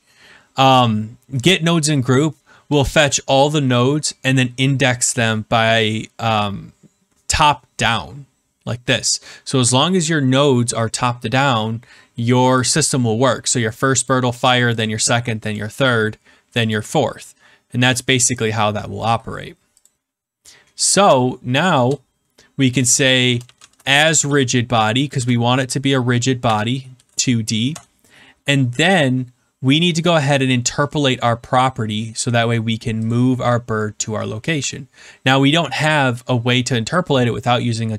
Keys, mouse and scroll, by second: 14.1 click, 14.8 click, 16.7 click, 20.8 click, 21.0 click, 21.7 Return, 22.9 ctrl+z, 23.1-24.7 typing, 25.1 Return, 26.4 2, 26.9 shift+d, 27.6 Return, 30.4 click, 33.1 click.